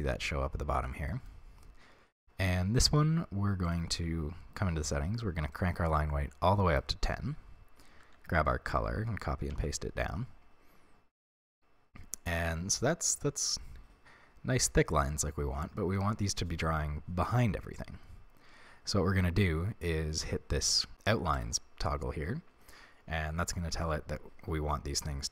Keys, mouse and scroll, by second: 0.7 Tab, 1.1-3.7 middle drag, 3.7 click, 3.8 middle click, 4.0-5.5 scroll down 1, 5.5-11.3 drag, 8.0 ctrl+c, 9.4 ctrl+v, 11.3-15.7 middle drag, 21.4 click.